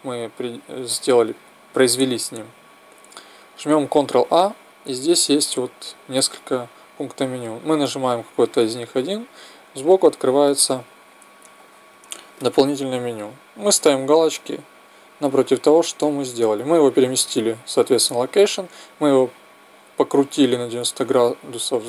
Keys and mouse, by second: 14.1-15.8 drag.